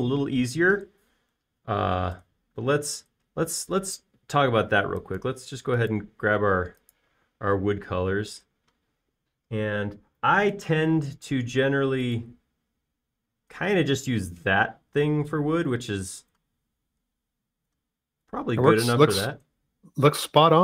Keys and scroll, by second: 3.7 b, 20.5 space.